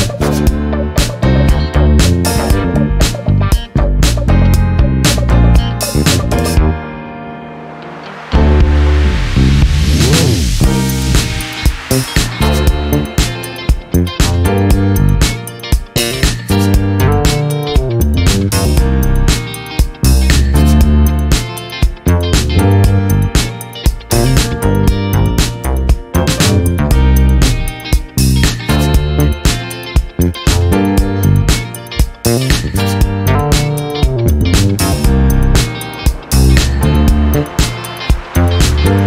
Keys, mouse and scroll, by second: 2.0 click, 3.2 ctrl+z, 3.8 ctrl+shift+click, 5.7 shift+click, 9.7 click, 12.4 click, 15.3 click, 17.1 ctrl+d, 18.3 shift+click, 19.8 ctrl+KP_Multiply, 23.7 click, 24.8 click, 27.3 click, 28.3 KP_5, 30.2 click, 30.8 click, 32.6 click, 33.8-39.0 drag.